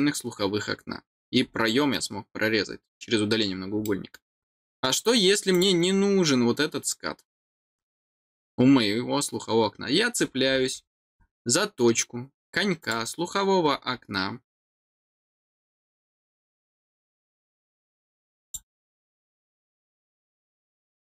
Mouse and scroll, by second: 1.1-1.4 scroll up 2, 3.8 middle click, 4.3 middle click, 4.6 middle click, 5.5 click, 10.1 middle click, 11.1 scroll up 1, 12.7 click, 13.5-14.0 scroll down 6, 18.4 click.